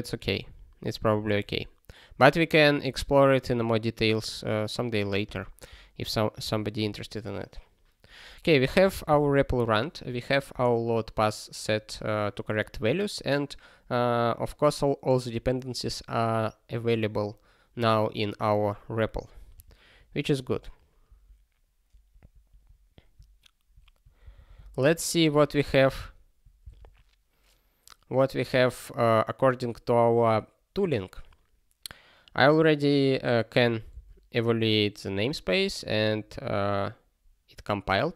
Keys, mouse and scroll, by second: 8.8 super+o, 21.8 super+o, 22.3 ctrl+a, 24.6 super+o, 26.1 click, 34.9 ctrl+k, 36.1 scroll up 1.